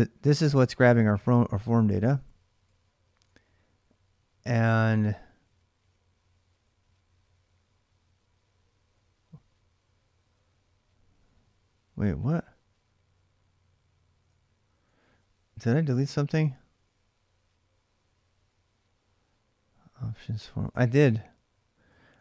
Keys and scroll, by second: 0.0-0.2 typing, 1.5 ctrl+[, 1.8-6.8 typing, 14.0-15.8 k, 20.5-22.2 typing.